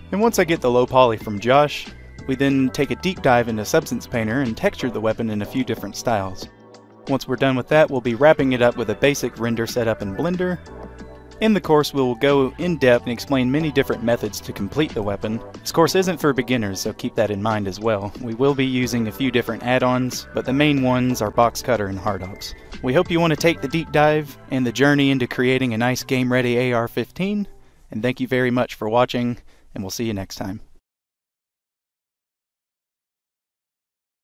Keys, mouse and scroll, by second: 0.5 alt+middle click, 0.6 click, 0.8 click, 1.2 middle click, 1.4 click, 1.9 click, 2.2 click, 2.2 scroll, 2.8 right click, 2.9 click, 3.1 typing, 3.3 Return, 3.4 click, 3.9 click, 4.1 alt+Num_Lock, 4.1 alt+click, 4.7 click, 5.1 alt+middle click, 5.3 click, 5.5 scroll down 1, 5.6 shift+click, 6.0 shift+click, 6.3 click, 6.4 scroll up 1, 6.5 click, 6.8 scroll down 1, 7.0 click, 7.1 right click, 7.1 click, 7.4 middle click, 7.5 click, 7.6 scroll down 1, 7.7 click, 8.1 click, 8.2 scroll down 1, 8.3 scroll up 1, 8.3 click, 8.5 alt+middle click, 8.5 click, 8.7 alt+click, 8.8 alt+middle click, 8.9 click, 8.9 scroll down 1, 8.9-9.8 typing, 9.7 click, 9.8 ctrl+right click, 10.0 ctrl+z, 10.0 click, 10.3 Caps_Lock, 10.3 click, 10.5 click, 10.7 click, 10.8 scroll down 1, 10.9 alt+click, 11.1 alt+click, 11.2 scroll up 1, 11.3 alt+middle click, 11.4 alt+click, 11.5 alt+scroll down 1, 11.6 shift+right click, 11.6 alt+click, 11.7 scroll.